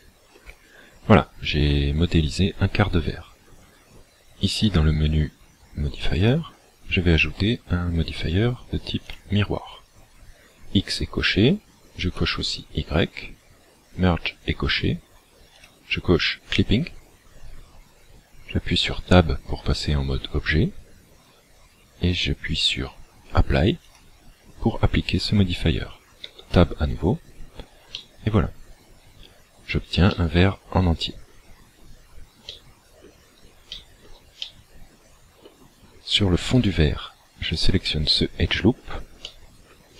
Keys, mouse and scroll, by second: 1.5-2.0 scroll down 1, 2.0-3.1 scroll down 1, 4.7 click, 6.2 click, 12.0 click, 15.6 click, 18.9 Tab, 23.9 click, 26.3 Tab, 27.9 middle click, 30.1 shift+middle click, 31.5 scroll up 2, 32.5 middle click, 33.8 shift+middle click, 34.4 middle click, 36.5 alt+right click, 38.0 middle click, 39.3 middle click.